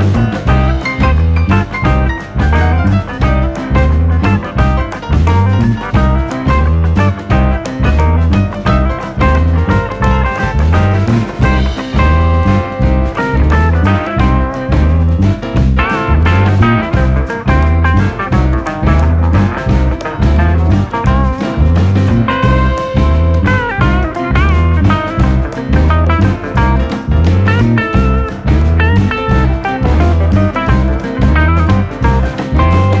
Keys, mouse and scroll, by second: 0.1 scroll up 2, 0.2-0.6 shift+middle drag, 0.6 click, 1.9 alt+/, 2.0 scroll down 9, 2.2 middle drag, 2.5 click, 2.8 drag, 3.1 KP_1, 3.3-3.8 scroll up 6, 3.8 click, 4.2-4.7 middle drag, 4.7 scroll up 2, 4.8-5.2 shift+middle drag, 5.2 click, 5.7-6.1 scroll down 4, 5.9 click, 6.1-6.6 middle drag, 6.6 click, 7.0 KP_3, 7.3 KP_1, 7.7 r, 8.4 scroll down 2, 8.5 shift+middle drag, 8.8-9.8 scroll up 1, 12.5 m, 13.6-14.2 scroll down 8, 14.2-14.8 scroll up 1, 14.8 shift+d, 16.2 r, 17.0 shift+middle click, 17.5 shift+d, 18.9 r, 19.6 g, 20.4 scroll down 1, 20.5-21.0 shift+middle drag, 21.0 click, 21.4 shift+d, 23.4 shift+middle click, 24.0 shift+d, 26.2 click, 26.6 shift+d, 28.0 drag, 28.1 scroll down 1, 28.3-28.8 middle drag, 28.8 scroll up 2, 29.3 KP_7, 29.5-29.8 scroll up 3, 29.8 click, 30.0 click, 30.8 click, 31.8-32.2 shift+middle drag, 32.2 click, 32.5 click.